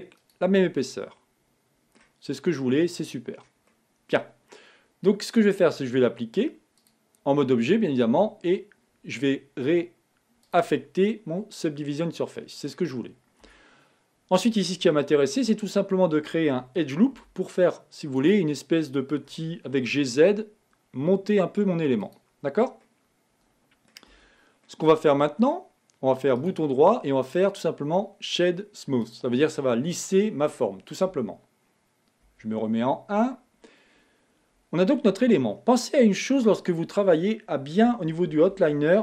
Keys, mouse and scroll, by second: 0.6 click, 1.4-2.6 middle drag, 2.6-3.2 scroll up 2, 3.3 scroll up 2, 3.5-4.0 scroll down 1, 4.0-7.0 middle drag, 7.6 click, 10.8 click, 11.4-13.8 middle drag, 13.8 Tab, 14.2-15.2 scroll up 1, 15.2-17.5 shift+middle drag, 17.5 ctrl+r, 22.8-23.2 scroll down 1, 23.2-24.4 middle drag, 24.4 Tab, 25.0-26.7 middle drag, 26.7-32.6 right drag, 32.6 KP_1, 36.8 click, 37.0-39.0 drag.